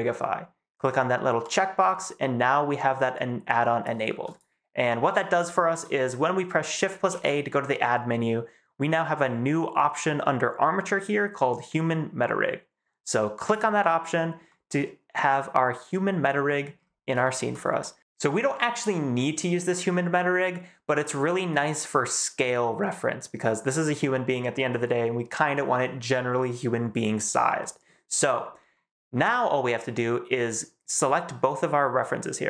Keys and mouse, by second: 4.2 click, 7.0 shift+a, 14.4-15.9 middle drag, 16.4 middle drag, 17.1 shift+middle click, 17.7 middle click, 18.0 ctrl+s, 22.7-23.3 middle drag, 24.6 middle drag, 27.5 middle drag.